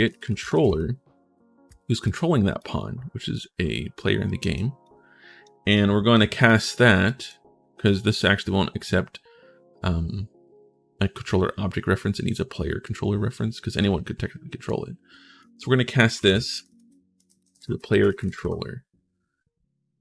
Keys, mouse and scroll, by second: 0.0-0.9 typing, 1.8 click, 1.8 right click, 2.4-3.7 drag, 2.4-3.7 right drag, 4.1 click, 4.1 right click, 4.6 click, 5.5 right click, 6.2 click, 6.8 right click, 7.6-15.2 drag, 7.8-15.2 right drag, 15.7-18.5 typing.